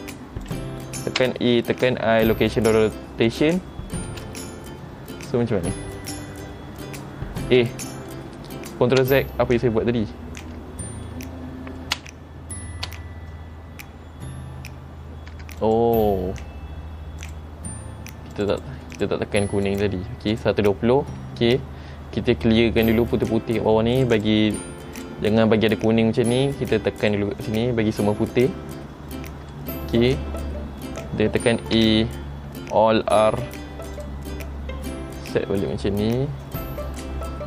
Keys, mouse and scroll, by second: 1.4 a, 1.9 i, 4.2 space, 7.6 space, 7.8 middle click, 9.2 ctrl+z, 12.1 ctrl+z, 15.8 click, 17.4 click, 18.5 click, 18.7 click, 19.1 click, 19.8 click, 20.5 click, 21.5 scroll down 2, 24.1 click, 24.3 click, 25.1 click, 27.2 click, 29.3 middle click, 30.0 scroll up 1, 31.9 a, 33.4 alt+r, 34.1 click, 35.4 r.